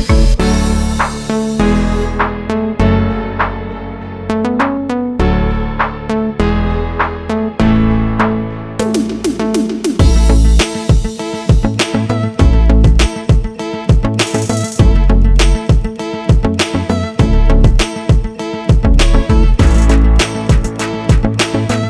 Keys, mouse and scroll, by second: 1.8 click, 2.0-2.6 scroll down 8, 2.6 click, 4.4 i, 5.1 click, 6.1 click, 7.2 click, 9.2 click, 9.7 click, 10.8 right click, 11.2 click, 11.5-11.9 scroll up 11, 12.2 click, 12.5 click, 12.9 middle click, 14.0 middle click, 15.4 shift+middle click, 16.5 click, 16.8 click, 17.2 click, 17.7 click, 19.9 click, 21.1 click, 21.3-21.8 scroll down 4.